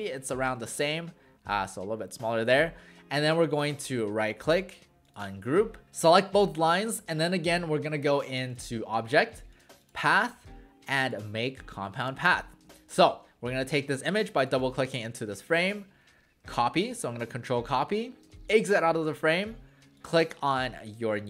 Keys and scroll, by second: 16.6 ctrl+c.